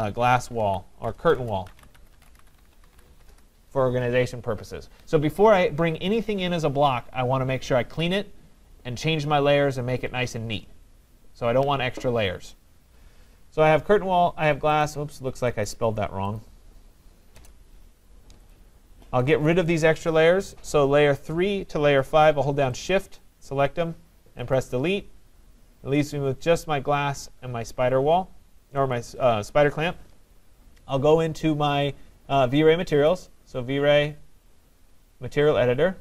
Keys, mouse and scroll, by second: 0.0-3.7 typing, 4.9-5.6 typing, 14.9 click, 16.5 click, 17.4 BackSpace, 18.6 click, 19.4 click, 22.9 shift+click, 23.0 shift+click, 24.6 click, 29.0 click, 33.1 click.